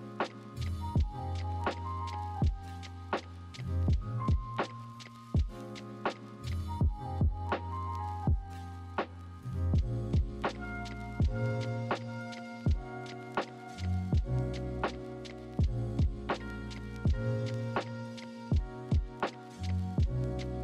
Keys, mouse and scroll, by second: 2.7 ctrl+-, 2.9 ctrl+=, 3.0 ctrl+-, 3.2 ctrl+=, 3.7 ctrl+-, 3.9 ctrl+=, 5.2 ctrl+=.